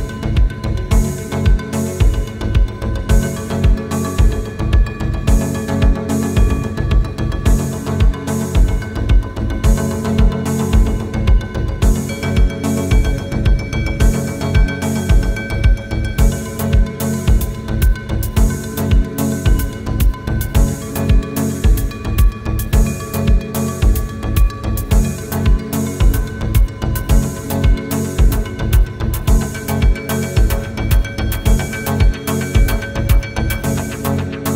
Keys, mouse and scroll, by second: 4.9 right click, 5.4 click, 6.4 ctrl+d, 6.9 click, 7.0 space, 7.6 click, 15.5 click, 16.0 click, 16.0 space, 22.3 click, 22.4 space, 22.4-22.8 click, 23.0 click, 27.3 right click, 27.9 click, 29.9 ctrl+d, 30.2 space, 30.4 click, 30.5-32.0 space, 32.8 click, 33.6 space, 33.8 click, 34.0 space.